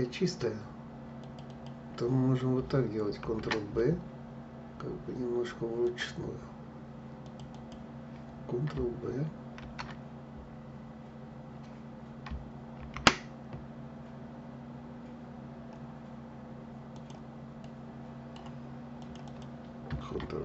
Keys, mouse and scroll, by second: 1.2 click, 2.9 ctrl+b, 6.9 click, 7.2 click, 9.3 ctrl+g, 12.5 ctrl+b, 17.3-18.7 middle drag, 18.7 click, 18.9 click.